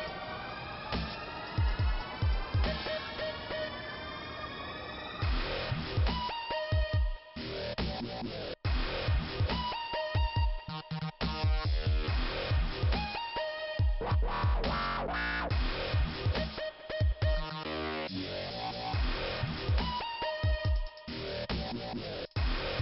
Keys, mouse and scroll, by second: 2.0 click, 2.2 click, 2.3 right click, 2.4 double right click, 2.7 typing, 3.8 click, 5.1 click, 6.7 click, 11.0 click, 12.4 p, 12.9 scroll down 2, 14.4 middle click, 15.5 click, 17.0 click, 17.6 middle click, 20.6 click.